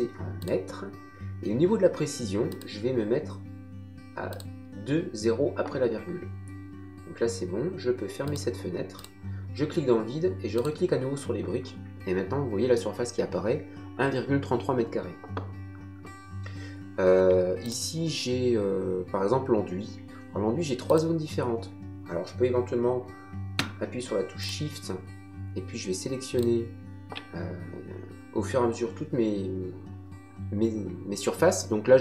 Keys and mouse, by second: 0.4 click, 2.5 click, 4.3 click, 8.2 click, 10.5 click, 17.7 click, 20.9 click, 24.4 shift+click, 26.3 shift+click.